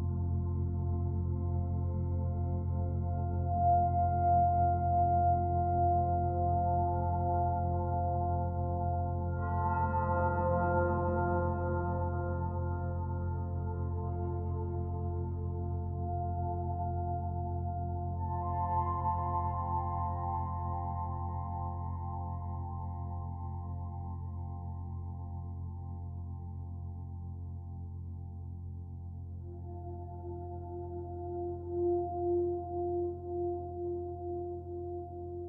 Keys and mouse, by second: 1.2 g, 1.6 1, 2.1-4.3 drag, 4.5 s, 4.8 z, 8.4 shift+click, 10.0 typing, 12.0 click, 12.8 typing, 13.7 click, 14.7 click, 15.2-17.8 typing, 16.2 click, 18.0-19.5 drag, 19.8-21.1 drag, 19.8 typing, 21.6 click, 22.3-23.0 typing, 23.8 shift+click, 25.9 click, 26.8 typing, 30.6 click, 31.6 Delete, 31.9 click, 33.1 shift+d, 33.9 shift+click.